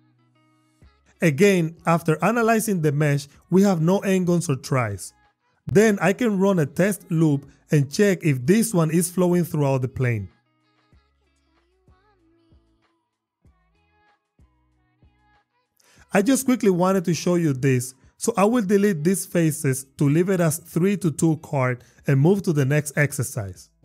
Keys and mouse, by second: 0.0 y, 0.4 click, 0.6 click, 8.1 ctrl+r, 14.5 click, 14.7 drag, 14.8 Tab, 15.1 click, 16.7 shift+click, 17.1 shift+click, 17.9 x.